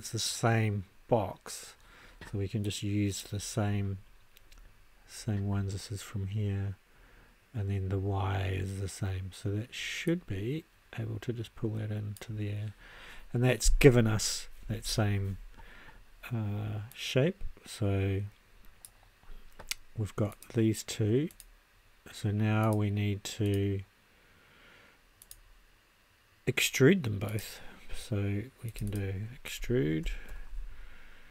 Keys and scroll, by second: 29.6-30.8 typing.